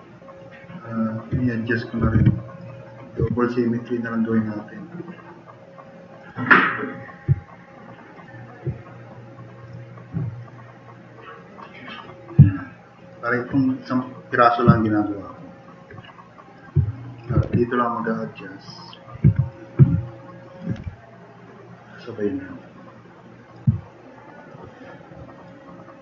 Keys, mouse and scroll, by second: 2.0 e, 2.2 e, 2.4 click, 2.6 click, 3.2 f, 3.4 click, 12.7-13.1 drag, 14.7-15.4 drag, 15.5 click, 17.0 click, 17.4 e, 17.4 e, 17.9 click, 19.2 f, 20.8 e, 25.3 click, 25.6 click.